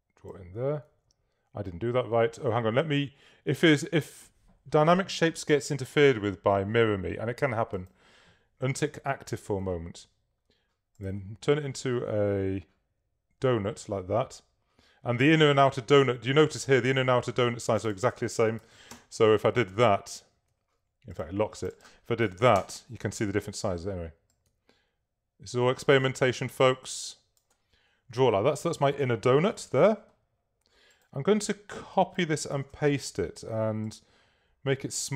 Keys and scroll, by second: 1.0 super+z, 18.4-19.3 typing, 20.7 super+z, 22.3 2, 29.6 super+v, 32.3 super+c, 32.6 super+f, 33.4 shift+super+f.